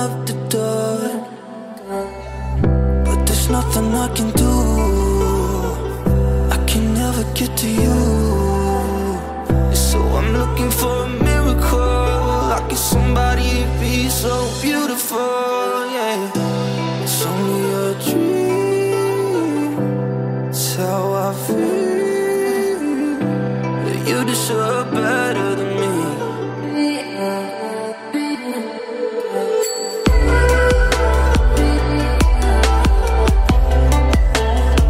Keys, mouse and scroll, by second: 8.2 space, 8.3 click, 8.5 space, 9.5-10.8 drag, 13.2 space, 13.3-13.7 click, 13.5 space, 13.7-14.1 click, 14.5-15.3 drag, 18.4 ctrl+d, 18.8 alt+scroll down 1, 19.4 alt+scroll up 1, 20.7-21.9 drag, 23.8 alt+scroll up 1, 24.3-25.4 drag, 26.3 ctrl+d, 26.5 alt+scroll down 1, 27.1 alt+scroll down 1, 27.3-27.9 alt+scroll up 1, 28.5-29.5 drag, 31.5 ctrl+d, 31.8 alt+scroll down 1, 33.0 alt+scroll up 1, 34.1-34.8 drag.